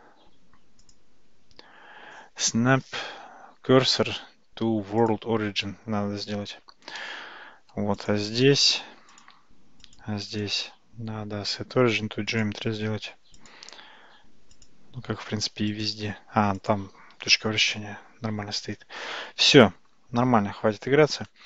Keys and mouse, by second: 0.8-5.2 drag, 8.0 click, 8.4-9.1 right drag, 9.9 click, 10.4-12.5 right drag, 13.4 click, 14.6 click, 15.8-16.8 right drag.